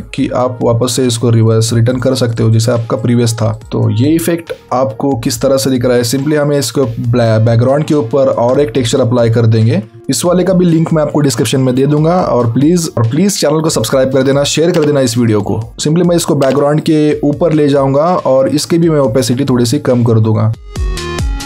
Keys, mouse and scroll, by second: 0.0 alt+scroll down 1, 0.3-0.9 alt+scroll up 2, 1.4 click, 3.6 alt+scroll down 1, 4.3-6.6 alt+scroll up 2, 8.3 click, 9.6-12.4 scroll down 3, 15.4 alt+click.